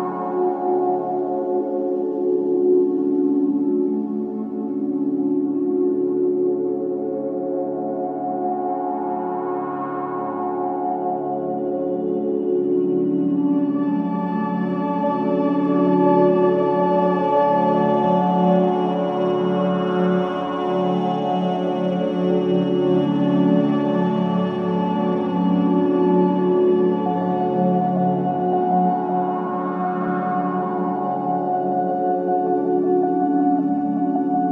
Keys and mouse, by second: 0.1-1.3 drag, 0.7-1.8 typing, 3.3 typing, 4.6-7.1 alt+drag, 7.7-8.4 typing, 9.2 click, 10.2 click, 11.1 click, 12.3 alt+click, 14.3 click, 15.1-15.8 typing, 17.4-18.1 typing, 18.3 click, 18.7 click, 22.3-23.4 drag, 25.5-26.6 drag, 27.3-28.4 drag, 28.0 space, 29.1 typing, 30.3-32.4 typing.